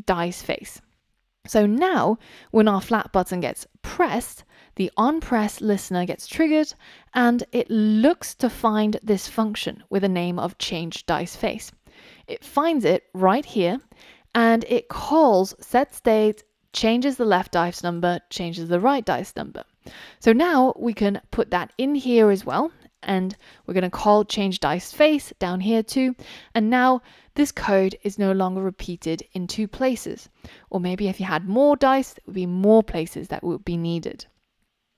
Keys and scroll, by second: 23.3 Return.